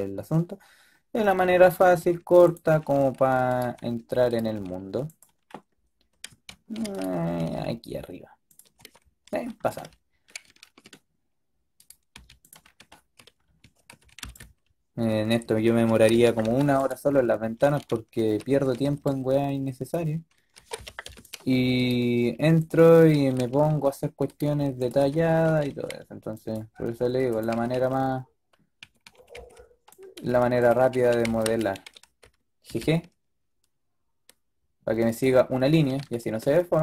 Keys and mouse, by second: 1.5-2.6 drag, 1.9-4.4 typing, 6.4 ctrl+z, 7.3 g, 8.7 a, 12.1 g, 13.5 a, 13.8 a, 14.0 a, 14.1 b, 15.8 s, 18.0 a, 18.4 a, 18.6 a, 18.8 b, 20.4 s, 21.8 click, 22.2 g, 23.0 a, 23.3 a, 24.4-25.6 typing, 26.6 g, 27.4 a, 27.6 a, 28.7 a, 29.0 a, 29.2 a, 29.2 b, 30.5-32.0 typing.